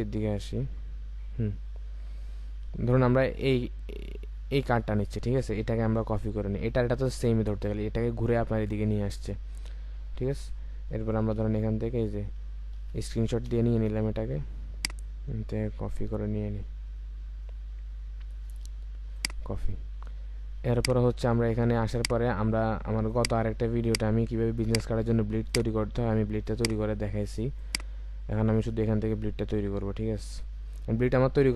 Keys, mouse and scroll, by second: 1.1 scroll up 1, 3.5 scroll down 1, 4.3-6.7 scroll up 1, 7.2 scroll down 1, 9.0-9.9 scroll up 1, 10.0-12.3 scroll down 1, 25.4 click.